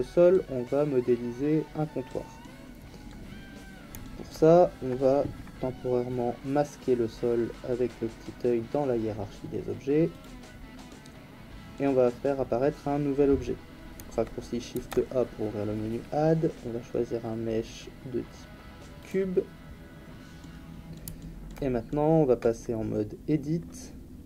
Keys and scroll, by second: 14.7 shift+a.